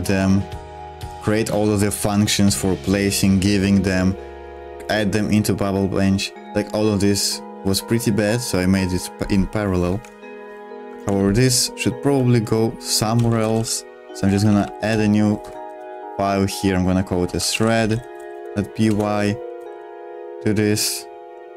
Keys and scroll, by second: 9.9 super+1, 10.8-20.0 typing, 18.8 Return.